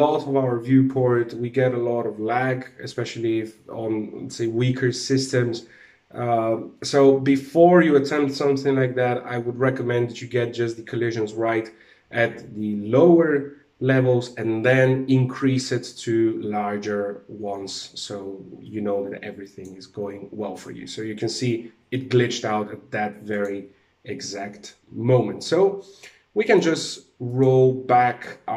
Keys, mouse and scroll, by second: 19.3 click, 22.8 click, 25.9 click, 26.7 click.